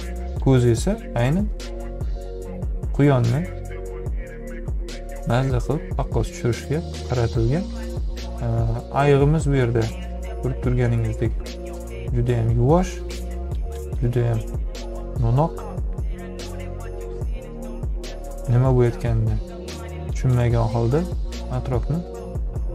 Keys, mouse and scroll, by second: 3.9-5.7 drag, 11.3-13.2 drag.